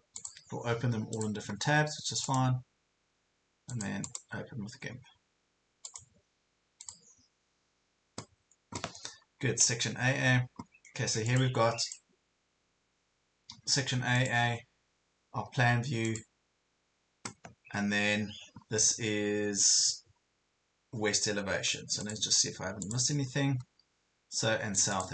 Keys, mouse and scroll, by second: 0.2 click, 2.3-3.3 right drag, 3.9 click, 4.1 right click, 5.9 click, 11.3 click.